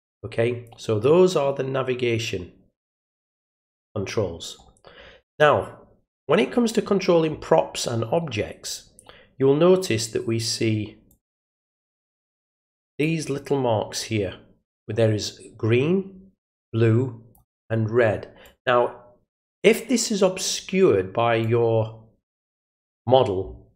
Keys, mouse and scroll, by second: 6.1 middle click, 11.1-13.0 drag, 16.4 click, 18.4-19.6 drag, 21.4 click.